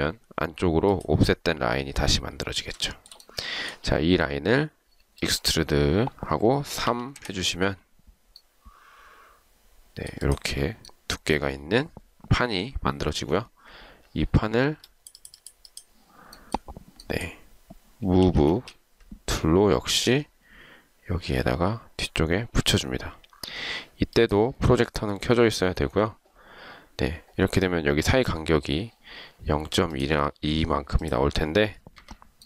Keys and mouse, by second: 3.0 shift+right click, 7.0 typing, 7.1 Return, 18.4 m, 18.7 space, 31.9 Escape.